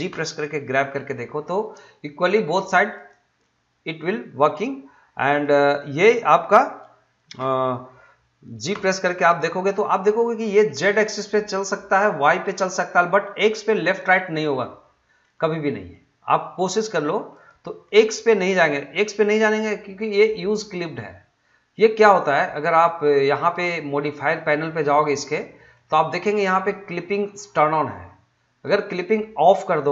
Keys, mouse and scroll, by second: 0.1 g, 2.9 right click, 3.4-5.3 middle drag, 5.3 click, 6.1 middle click, 8.7 g, 15.2 g, 17.3 right click, 17.8 middle click, 25.7-29.9 middle drag.